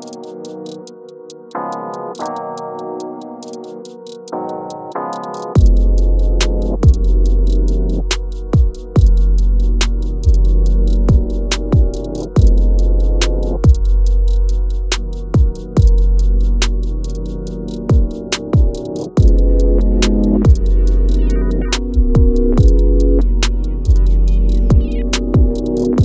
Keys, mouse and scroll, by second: 3.0-3.7 shift+scroll down 1, 4.5-18.1 drag, 18.1 alt+scroll up 1, 20.2-21.4 drag, 21.4 alt+scroll up 1, 22.3 shift+scroll up 1, 23.4-25.2 drag.